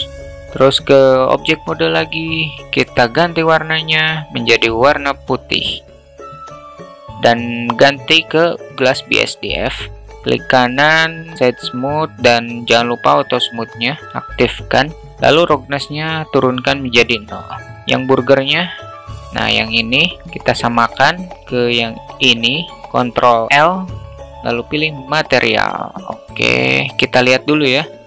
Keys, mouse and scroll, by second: 0.0 alt+middle click, 0.3 alt+Tab, 0.3 alt+middle click, 1.4-1.7 alt+middle drag, 4.7 drag, 6.0 drag, 11.8 q, 15.4 click, 17.0 alt+middle click, 17.2 alt+click, 17.6 alt+middle click, 18.1 Tab, 18.5 click, 23.6 ctrl+l.